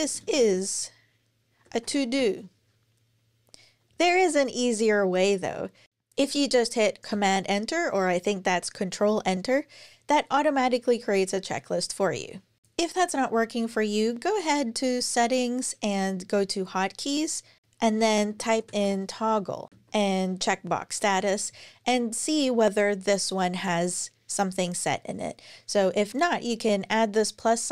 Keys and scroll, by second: 0.0-2.9 typing, 5.7 Return, 5.8 Return, 6.9 super+Return, 17.7-20.2 typing.